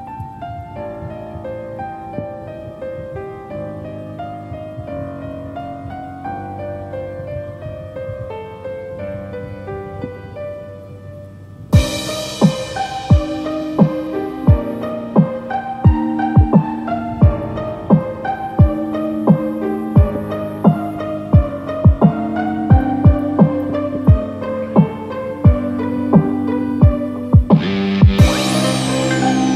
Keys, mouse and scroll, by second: 2.1 shift+click, 2.7 middle click, 3.5 e, 25.3 2, 25.8 scroll up 1, 25.8 middle click, 25.8 click, 25.8 scroll down 2, 26.6 shift+click, 27.0 shift+click, 27.8 s.